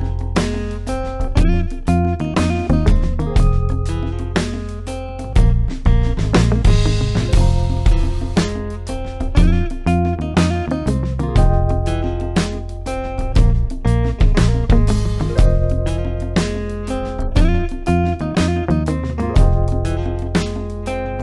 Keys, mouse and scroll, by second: 0.5-1.4 click, 4.8 click, 7.6 click, 18.0-18.6 drag.